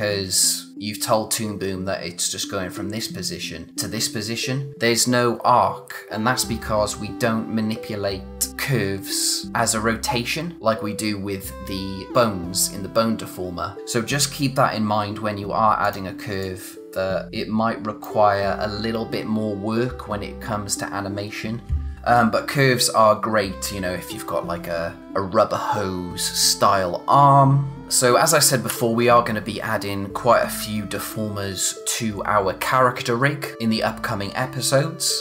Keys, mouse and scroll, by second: 3.7 click, 15.8 click.